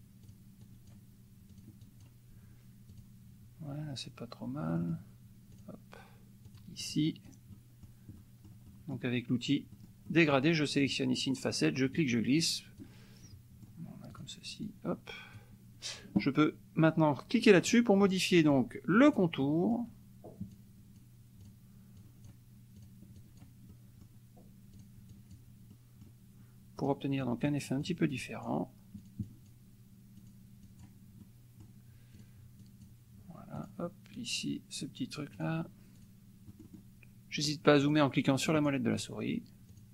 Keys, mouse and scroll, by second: 0.2 click, 0.6 click, 1.5 click, 1.8 click, 3.0 click, 4.6 middle click, 5.5 click, 6.5 click, 6.9 click, 7.5 middle click, 8.2 middle click, 9.8 middle click, 10.8 click, 11.9-13.0 drag, 13.2 middle click, 14.1 click, 14.6 click, 17.6 click, 18.1 middle click, 19.2 click, 19.4 middle click, 19.4 click, 20.5 click, 21.4 click, 22.0 click, 22.8 click, 23.4 click, 23.7 middle click, 24.8 click, 25.3 click, 25.7 click, 26.8 click, 27.2 click, 27.9 click, 28.4 click, 29.0 click, 30.1 click, 30.6 click, 31.2 click, 32.2 click, 32.6 click, 33.5 click, 34.1 click, 35.3 click, 36.0 click, 36.5 middle click, 37.9 click, 38.5 click, 39.8 click.